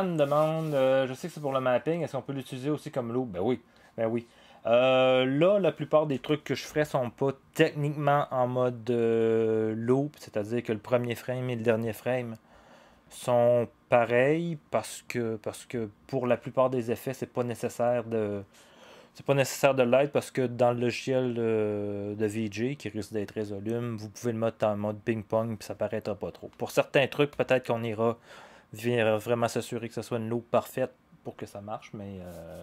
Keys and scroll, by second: 6.1 0.